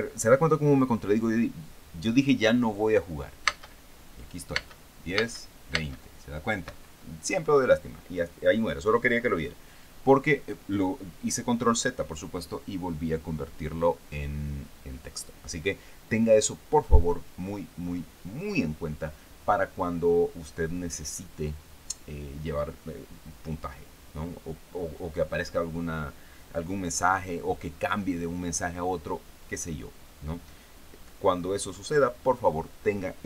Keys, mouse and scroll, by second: 3.9 space, 5.0 space, 7.1 Escape.